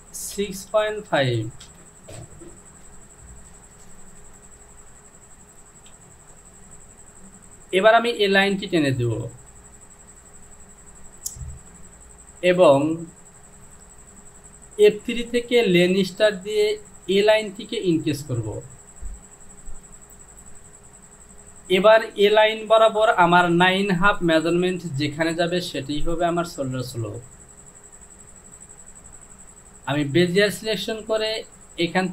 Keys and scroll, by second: 0.8 KP_Decimal, 1.2 KP_5, 1.7 Return, 5.7 Home.